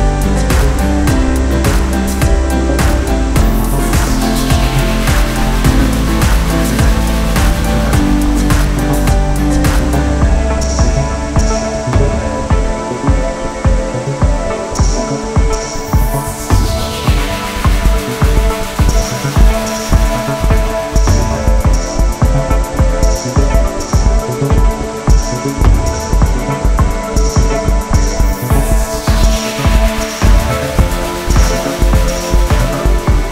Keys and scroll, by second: 0.6 ctrl+shift+a.